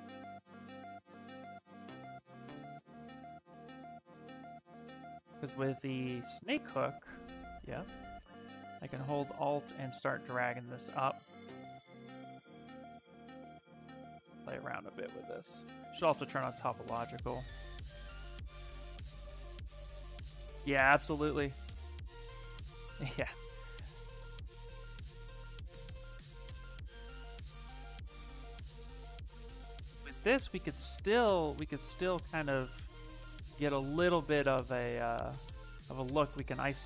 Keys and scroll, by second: 1.4 s, 4.1-6.6 typing, 10.6 s, 14.3 s, 25.3 s, 28.9 shift+f, 29.5 shift+f, 30.6 shift+f, 34.1 q.